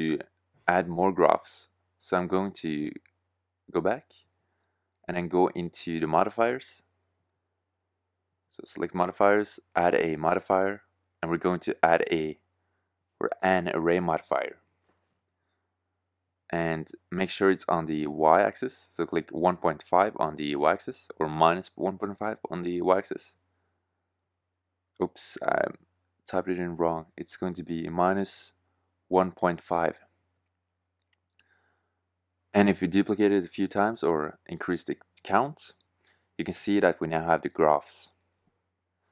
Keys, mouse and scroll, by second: 26.9 BackSpace, 27.1 BackSpace, 35.0 shift+z.